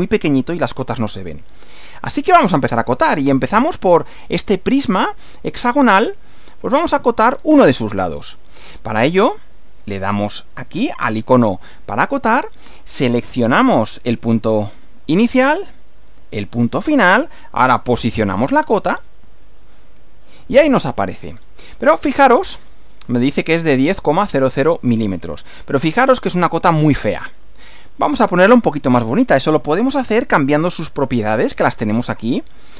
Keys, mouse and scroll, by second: 0.1 click, 3.1-4.0 shift+middle drag, 4.2-4.7 shift+scroll up 1, 4.7 shift+scroll down 1, 4.8 shift+middle click, 5.5 shift+middle click, 6.4-7.3 shift+middle drag, 7.3-7.7 shift+scroll up 3, 8.2 scroll down 2, 10.7 click, 14.3 click, 16.4 click, 19.7 click, 21.3 scroll up 1, 21.9 scroll down 1, 22.7-23.7 middle drag, 26.9-28.5 middle drag.